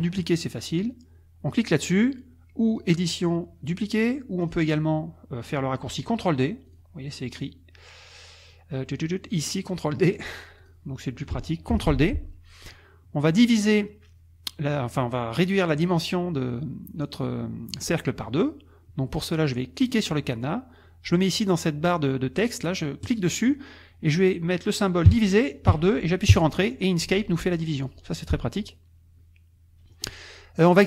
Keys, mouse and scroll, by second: 2.7 click, 4.4 click, 6.7 click, 10.2 click, 10.6 click, 11.7 ctrl+d, 19.8 click, 23.0 click, 25.1 KP_Divide, 25.7 KP_2, 26.3 KP_Enter.